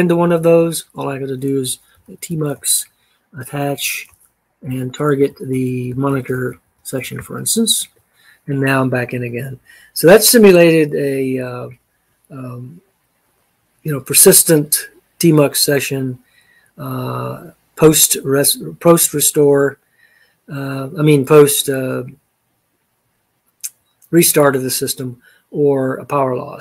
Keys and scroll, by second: 2.1-7.7 typing, 7.8 Return.